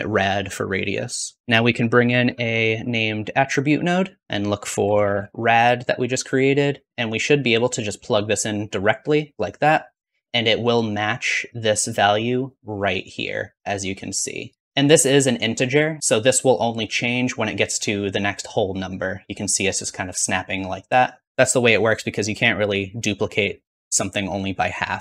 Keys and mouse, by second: 1.4 typing, 1.7-5.5 drag, 12.1-14.6 drag, 14.6 middle click, 15.1-16.4 drag.